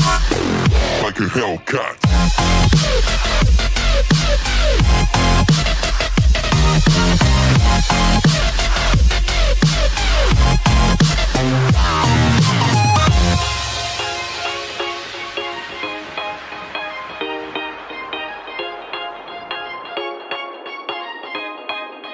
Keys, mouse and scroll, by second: 0.8 click, 2.9 ctrl+click, 4.5 ctrl+click, 5.5-22.1 ctrl+click, 6.3 right click, 6.3 right click, 8.2 click, 10.5 click, 11.4 click, 13.8 KP_1, 16.1 click, 19.0 click.